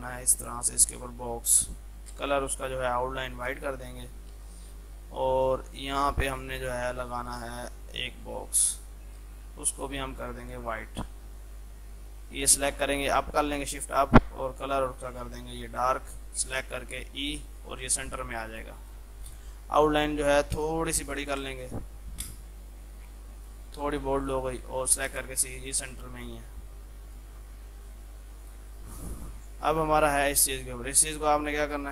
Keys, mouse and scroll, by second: 2.2 space, 2.6 right click, 3.4 shift+click, 3.6 c, 4.0 click, 4.4 F2, 4.6-9.3 drag, 9.3 space, 9.8 click, 10.6 right click, 11.4-13.2 drag, 13.2 shift+Page_Up, 14.7 click, 17.0 e, 18.2 F3, 18.6 click, 19.1 shift+F2, 19.4 click, 21.3 F12, 21.5 alt+w, 23.4 click, 24.6 ctrl+g, 25.1 shift+click, 25.3 c, 25.7 click, 25.9 F3, 26.5 click, 27.4 shift+F2, 28.4 click, 29.4 F2, 29.6-31.9 drag.